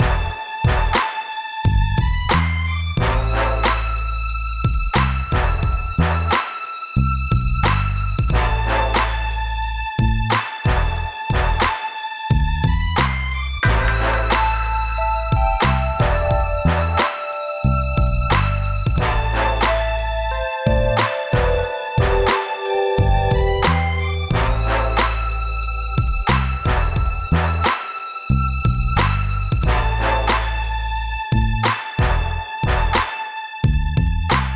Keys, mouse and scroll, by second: 3.1 scroll down 2, 3.9 click, 5.3 click, 6.6 p, 7.3 scroll down 2, 8.7 scroll down 2, 9.1 scroll up 1, 9.6 scroll up 1, 10.0 middle click, 13.3 click, 13.4 click, 16.0 click, 16.1 click, 18.1 click, 18.2 click, 19.3 click, 19.9 click, 21.1 click, 21.2 click, 22.2 click, 22.3 click, 22.6 click, 22.7 click, 23.6 click, 30.4 scroll down 2, 31.5 scroll up 1, 32.0 scroll up 1, 32.7 scroll down 3.